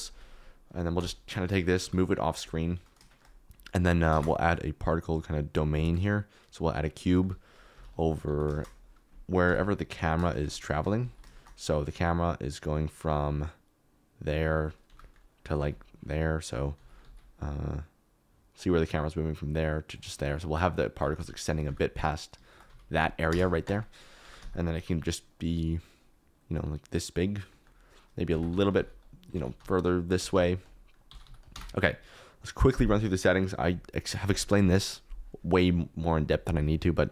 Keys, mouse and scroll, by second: 0.5 KP_Decimal, 0.9 KP_0, 1.8 g, 4.1 shift+a, 7.7 s, 8.2 g, 8.5 shift+z, 9.4 KP_7, 10.5 z, 10.7 shift+click, 11.0 alt+z, 14.8 g, 15.5 s, 15.9 click, 16.7 z, 18.0-19.5 drag, 21.0 s, 21.1 x, 21.6 g, 22.6 s, 22.9 click, 23.2 KP_0, 24.2 g, 24.3 z, 28.3 Tab, 28.4 3, 28.7 alt+z, 29.4 alt+z, 29.5-31.2 typing, 31.3 click, 31.6 Tab.